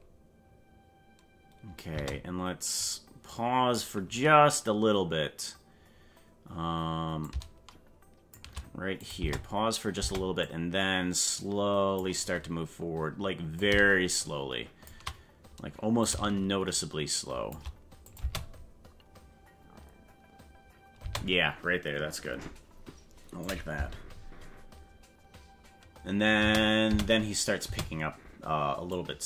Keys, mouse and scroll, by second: 1.9 space, 2.8-3.8 drag, 7.2-8.3 shift+drag, 9.0 click, 9.2 space, 10.0 space, 10.4-12.0 drag, 13.6-14.9 shift+drag, 16.0-17.5 shift+drag, 18.0 click, 18.2 space, 21.0 space, 23.4 click, 23.7 space, 26.4 space, 27.6 space, 28.9 click.